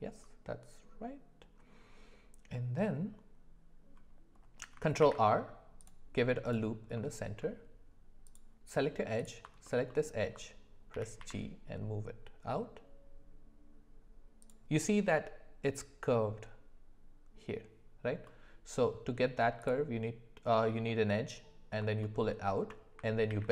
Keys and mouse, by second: 5.0 ctrl+r, 6.9 middle click, 9.9 alt+middle click, 10.9 g, 18.3 middle click, 22.0 alt+middle click, 22.3 alt+middle click, 23.3 ctrl+b.